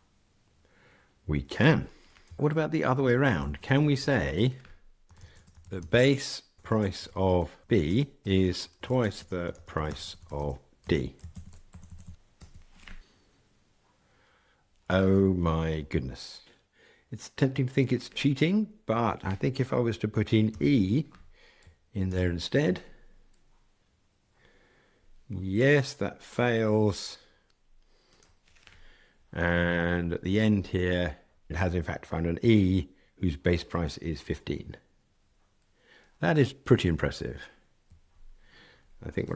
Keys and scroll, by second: 22.0 ctrl+r.